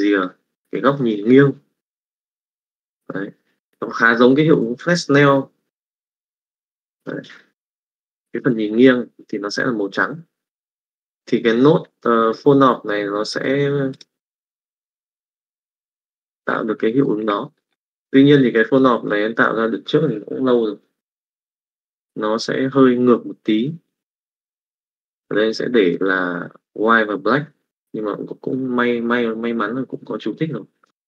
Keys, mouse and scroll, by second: 2.0-3.8 drag, 7.1 click, 13.2 click, 14.5 click, 15.7 click, 17.0 middle click, 17.5 middle click, 18.7 click, 24.6 click, 25.5 middle click, 26.1 click.